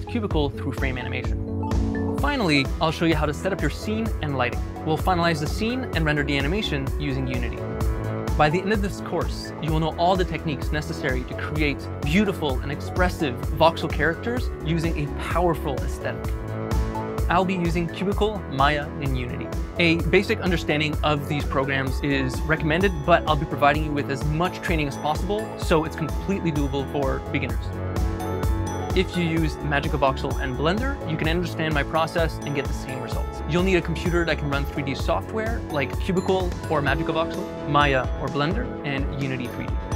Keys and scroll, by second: 3.9 Tab, 6.7 s, 24.2 e.